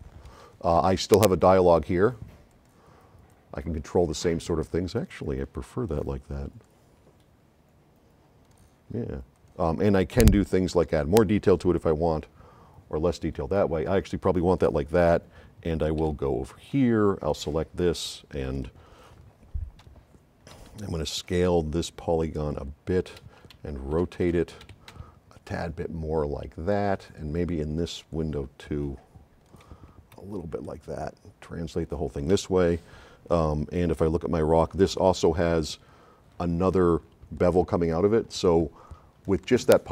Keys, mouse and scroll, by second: 1.4-2.3 drag, 3.3 click, 8.5 click, 9.1 click, 10.2-12.3 drag, 16.0 s, 16.1 right click, 17.3 click, 18.4-19.1 drag, 20.0 c, 20.8 x, 21.2 click, 22.1-23.1 middle drag, 23.6 x, 24.3 c, 25.1 c, 25.3-26.7 drag, 28.2 click, 30.2 v.